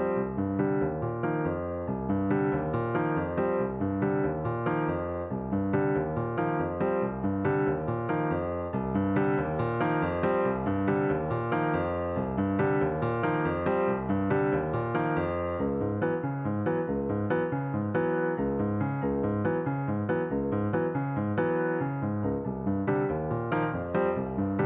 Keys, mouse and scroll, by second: 1.8 click, 2.2-2.7 scroll up 5, 2.7-3.9 middle drag, 3.9 click, 5.5 shift+s, 9.0 click, 9.9 click, 10.8 alt+click, 12.0 click, 15.3 click, 18.8-24.6 right drag.